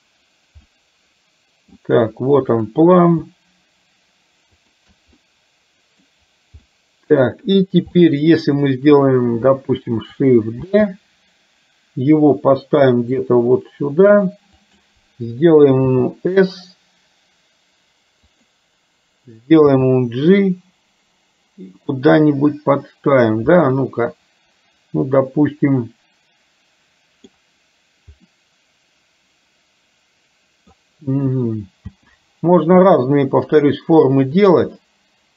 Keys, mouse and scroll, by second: 0.8-1.9 middle drag, 4.7 shift+click, 5.2 middle click, 6.6 middle click, 8.1 middle click, 10.9 shift+d, 16.1 s, 19.8 g, 23.0-27.5 middle drag, 28.4-30.8 middle drag, 32.1 g, 34.8-35.3 middle drag.